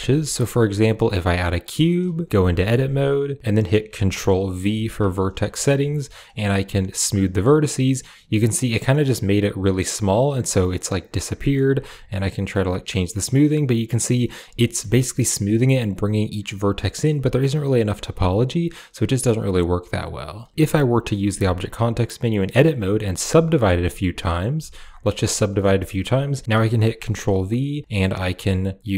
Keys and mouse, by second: 2.1 click, 2.2 Tab, 4.5 ctrl+v, 8.5 middle click, 10.6 middle click, 12.1-14.1 drag, 14.5 middle click, 17.1-19.8 drag, 21.2 w, 23.0 w, 23.4 w, 23.8 click, 24.4 w, 25.4 click, 26.8 ctrl+v.